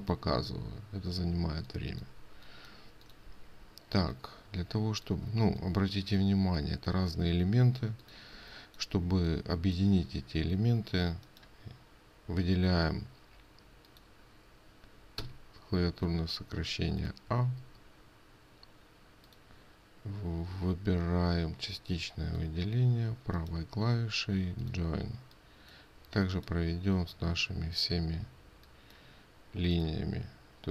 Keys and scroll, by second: 1.9 ctrl+space, 5.7 ctrl+space.